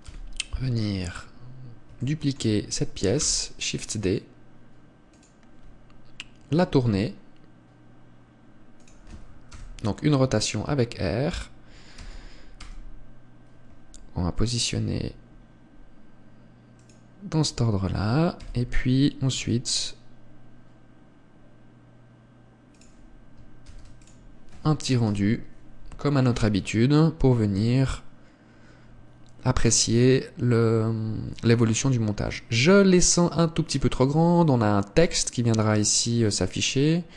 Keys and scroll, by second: 0.5 KP_7, 3.7 shift+d, 10.0 KP_0, 24.1 ctrl+s.